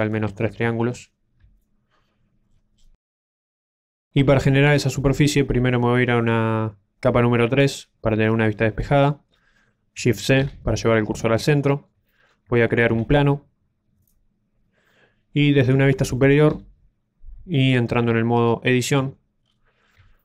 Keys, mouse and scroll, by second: 0.2-0.8 ctrl+d, 0.8 ctrl+click, 1.9 ctrl+d, 2.4 ctrl+d, 2.9 d, 3.1 right click, 4.0 d, 7.5 click, 8.0 middle click, 10.3 shift+c, 11.6 shift+middle click, 12.0 middle click, 12.8 shift+a, 17.5 shift+middle click, 17.5 KP_7, 19.0 Tab, 19.4 scroll down 1, 19.8 scroll down 1, 20.1 shift+middle click.